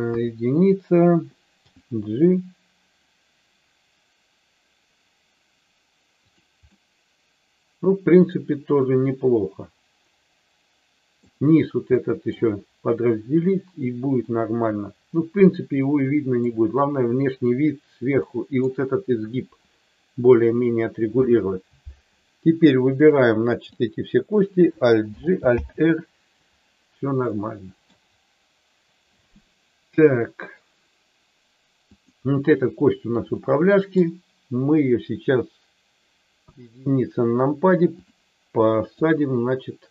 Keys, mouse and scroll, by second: 0.1 KP_1, 1.7 g, 6.6-11.1 middle drag, 11.9 middle click, 14.3-16.5 middle drag, 18.1 middle click, 22.9 click, 25.0 alt+g, 25.5 alt+r, 27.3 middle click, 33.4 middle click, 36.4 KP_1, 39.0-39.9 drag.